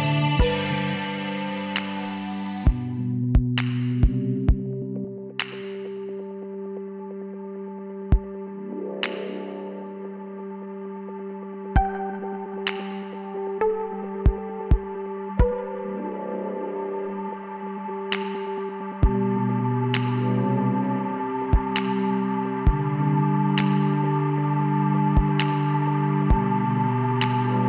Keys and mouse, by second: 1.8-3.6 drag, 5.6-7.3 middle drag, 7.3 e, 12.3-13.5 drag, 13.2 l, 14.5-16.3 drag, 15.1 l, 16.0 s, 19.5 click, 19.6 middle click, 21.1 KP_1, 23.3 z, 23.7-26.1 drag, 26.3-27.6 drag.